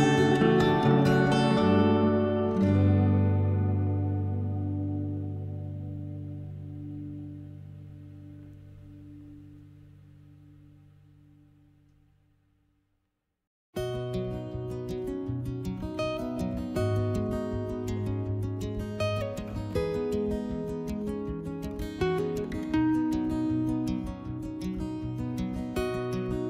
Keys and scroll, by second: 1.0 s, 19.4 3, 24.9 s.